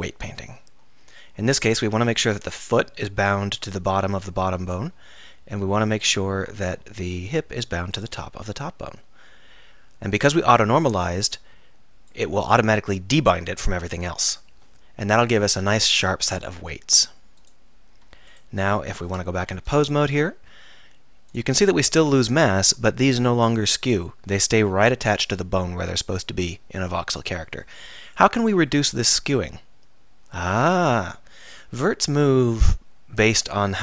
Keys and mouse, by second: 1.8-4.2 drag, 4.2-5.0 middle drag, 7.1-8.2 middle drag, 9.5-17.0 middle drag, 19.4 KP_3, 20.3 r, 21.4-22.6 drag.